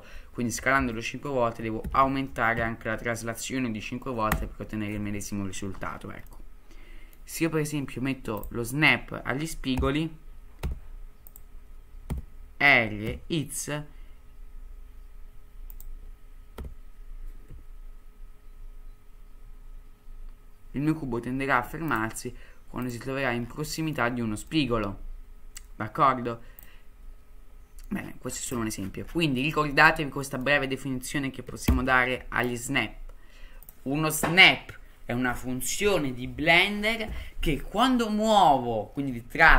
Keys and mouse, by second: 6.3-7.2 middle drag, 8.4-9.7 drag, 9.7 g, 12.1 r, 16.6 r, 23.8 middle click, 24.6-25.7 middle drag, 26.8-27.3 drag, 29.4 middle drag, 30.2 middle drag, 31.7 ctrl+n.